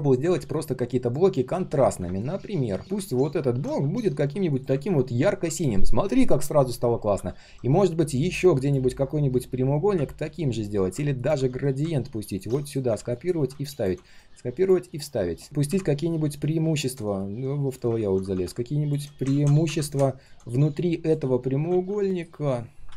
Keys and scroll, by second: 2.8 ctrl+z, 11.6 ctrl+alt+c, 12.6 ctrl+alt+v, 14.0 ctrl+alt+v, 17.9 ctrl+z, 19.3 ctrl+z, 21.7 ctrl+z, 22.1 ctrl+shift+].